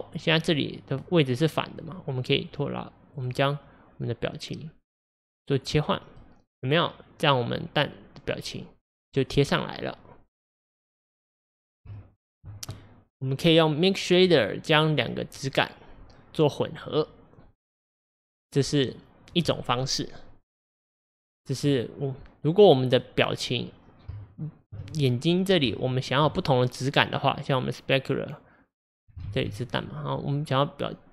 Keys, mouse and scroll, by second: 2.4-3.1 drag, 6.1-9.2 middle drag, 12.0-14.8 shift+middle drag, 14.8-23.0 drag, 23.0-27.6 middle drag, 27.6-29.3 drag, 29.3 ctrl+z, 29.5-30.9 middle drag, 30.9-31.1 drag.